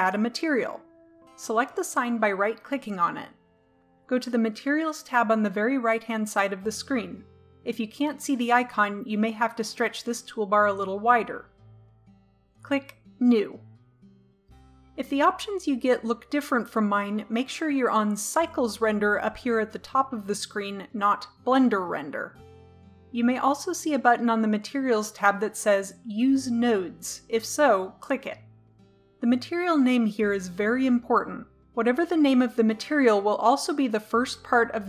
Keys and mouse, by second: 2.0 right click, 8.3-10.2 right drag, 11.8 click, 13.2-17.0 drag, 19.3-30.5 drag.